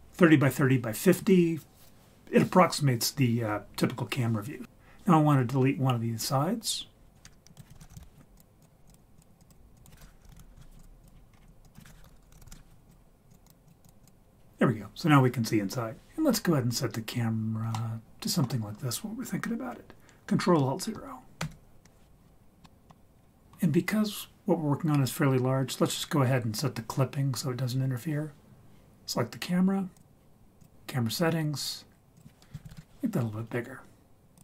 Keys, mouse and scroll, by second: 7.5 click, 7.6 shift+middle click, 7.7 shift+a, 8.8 scroll down 1, 8.9 drag, 9.4 click, 9.7-11.0 drag, 11.1 scroll down 2, 11.3-11.6 scroll up 4, 11.6 click, 13.3 click, 13.6 click, 13.8 click, 14.0 click, 17.7 middle click, 21.4 ctrl+alt+KP_0, 22.3-23.3 scroll down 7, 22.6 middle click, 23.2 scroll up 2, 23.4-25.5 scroll down 1, 30.0 click, 30.6 click, 32.2 click, 32.7 0, 34.3 click.